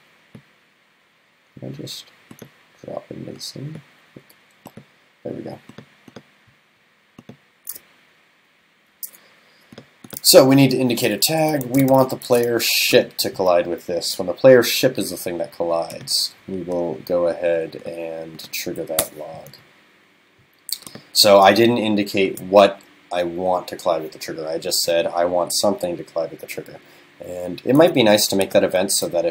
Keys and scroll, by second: 19.0 super+BackSpace.